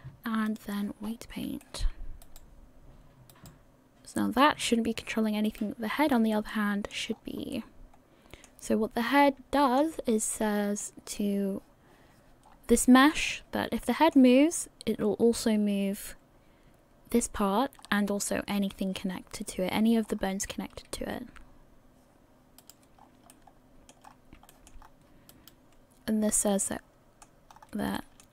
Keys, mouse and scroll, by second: 1.0-1.6 scroll up 3, 1.6 shift+middle click, 2.5 right click, 3.6 right click, 5.8 right click, 6.3 middle click, 6.9 scroll down 1, 7.5 middle click, 7.5 scroll down 3, 9.0-9.5 scroll up 2, 9.5 shift+middle click, 9.9 middle click, 12.5 scroll down 5, 13.2-13.9 scroll up 4, 13.9 shift+middle click, 17.9 scroll down 1, 18.9 scroll down 6, 20.1-21.0 scroll up 7, 21.0 r, 23.0 scroll down 3, 23.3 middle click, 24.0-25.1 scroll up 4, 24.5 shift+middle click, 25.6 right click, 26.2-26.7 scroll down 4, 26.6 middle click, 27.5-27.9 scroll up 3, 28.0 shift+middle click.